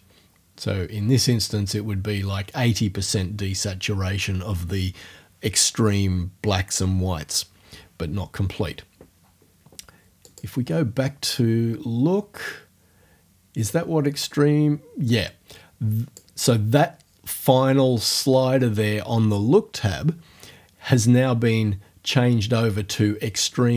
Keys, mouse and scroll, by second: 10.3 click, 13.7-16.3 drag.